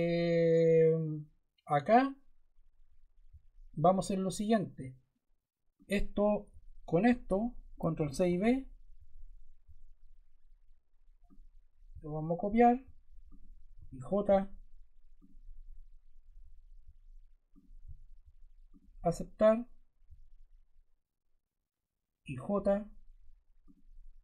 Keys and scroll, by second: 6.4 shift+Caps_Lock, 7.9 super+c, 8.1 super+v, 13.6 j, 22.1 j.